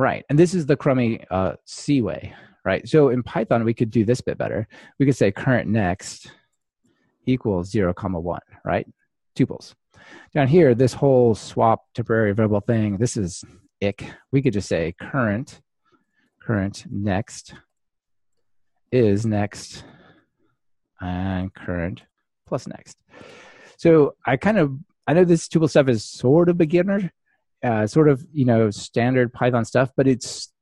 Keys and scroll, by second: 21.9 Return.